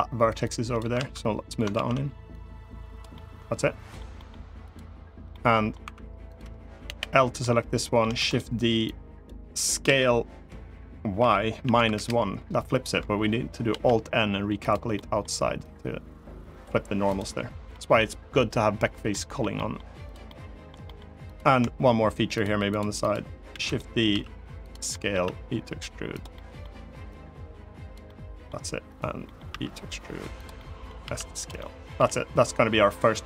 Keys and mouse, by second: 0.1 click, 0.7 ctrl+z, 1.5 ctrl+z, 2.1 click, 2.8 middle click, 3.9 middle click, 5.0 middle click, 5.6 3, 6.6 l, 7.1 middle click, 7.9 shift+d, 8.0 click, 8.5 click, 9.6 s, 11.1 y, 11.3 -, 11.5 1, 11.7 Return, 13.4 alt+n, 14.7 middle click, 15.4 click, 16.8 click, 17.4 middle click, 18.8 middle click, 19.3 middle click, 20.0 middle click, 20.6 middle click, 21.0 click, 22.5 shift+click, 23.2 shift+d, 23.3 middle click, 23.3 right click, 23.8 s, 24.3 click, 24.6 middle click, 24.9 e, 25.8 click, 26.0 middle click, 26.8 click, 27.8 middle click, 28.6 click, 28.9 middle click, 29.2 e, 30.1 click, 30.3 middle click, 30.7 s, 31.1 click, 31.3 middle click, 31.7 g, 32.7 click.